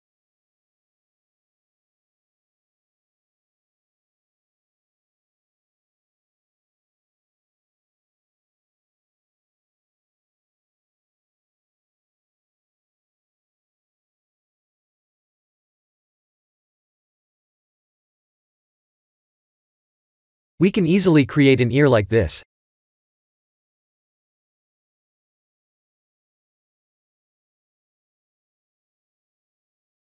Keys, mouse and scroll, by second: 1.2 middle click, 2.7 ctrl+z, 3.3 middle click, 4.7 KP_1, 5.5 click, 6.1 click, 12.0 Tab, 12.6 Tab, 13.6 b, 15.6 x, 18.5 click, 20.2 scroll up 1, 21.5-22.0 scroll up 2, 22.0 click, 22.4 middle click, 26.0 shift+click, 26.9 click, 27.5 click, 28.0 shift+click, 28.4 middle click.